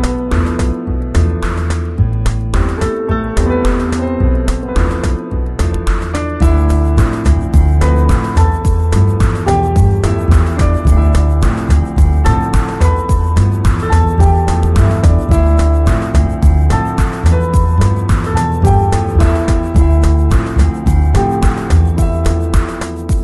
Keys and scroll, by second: 5.1 Return.